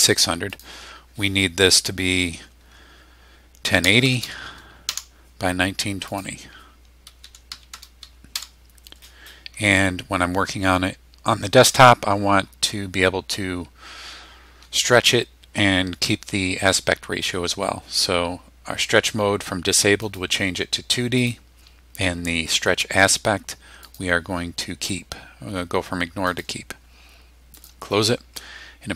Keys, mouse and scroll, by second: 0.5 click, 3.4-4.7 typing, 4.9 Return, 6.1 click, 6.8-8.2 typing, 8.8 Return, 9.3-10.0 scroll down 4, 20.0 click, 21.2 click, 23.8 click, 26.3 click, 27.5 click.